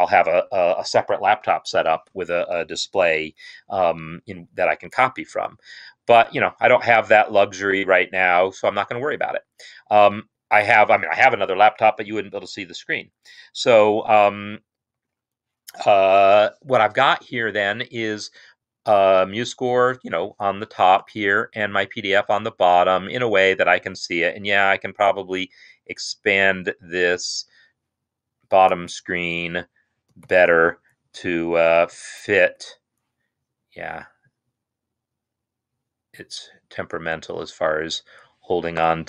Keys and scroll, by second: 30.4 Tab.